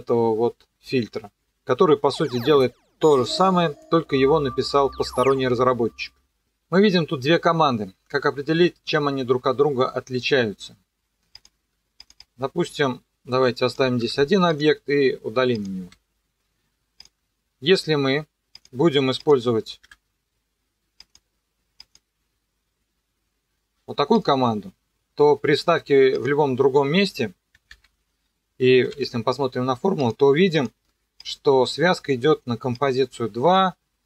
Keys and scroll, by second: 14.0 Delete, 19.9 Delete, 27.7 ctrl+v, 28.7 e.